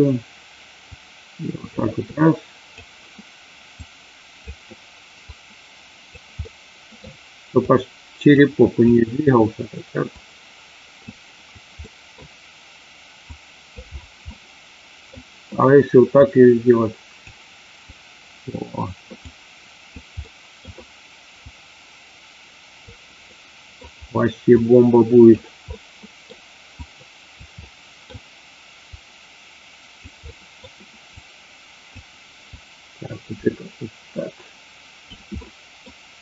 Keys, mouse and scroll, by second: 0.8 click, 2.1 click, 3.7 click, 5.2 click, 6.3 middle click, 7.7 click, 8.8 click, 10.2 click, 11.8 middle click, 13.2 click, 14.2 middle click, 16.2-17.2 drag, 17.8 click, 19.2 click, 20.2 middle click, 21.5-22.8 drag, 23.3 middle click, 24.6 click, 25.7 middle click, 26.7 click, 27.6 middle click, 29.0 click, 30.2 middle click, 31.0 click, 32.4 click, 33.3-35.2 drag, 35.3 middle click.